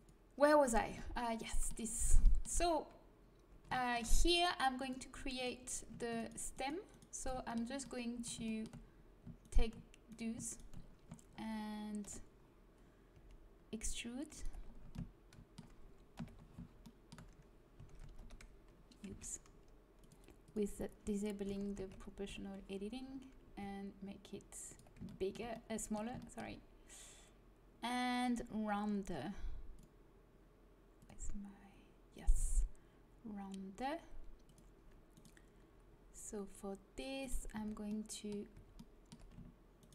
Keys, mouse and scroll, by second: 0.5-4.7 middle drag, 4.7-6.2 drag, 5.3 right click, 6.7-7.9 right drag, 8.0 right click, 11.9 KP_1, 13.1 e, 16.1 KP_1, 17.7 s, 19.9 click, 21.4 s, 23.4 s, 25.0 middle click, 32.1-33.3 right drag, 33.3-36.3 middle drag, 36.3-37.5 right drag, 37.5 middle click, 37.5 z, 38.0 middle click, 38.5 z.